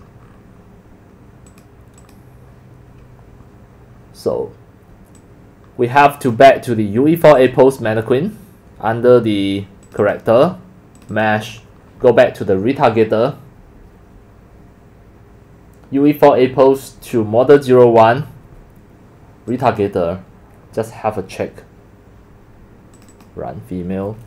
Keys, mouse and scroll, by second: 1.5 click, 2.0 click, 2.7 drag, 3.6 click, 5.2-5.7 drag, 9.8 click, 10.0 click, 10.3-10.7 drag, 10.9 scroll down 2, 11.3 click, 19.5 click, 21.2 click, 22.9 click, 23.1 click.